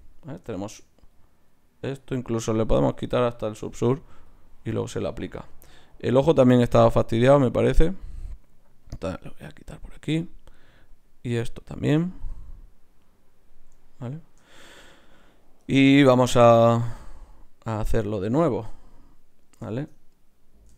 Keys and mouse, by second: 0.6-2.7 middle drag, 1.1-2.8 right drag, 3.2 click, 5.1 click, 6.0-7.1 drag, 7.3-12.4 drag, 12.4-13.4 right drag, 15.2-20.7 drag.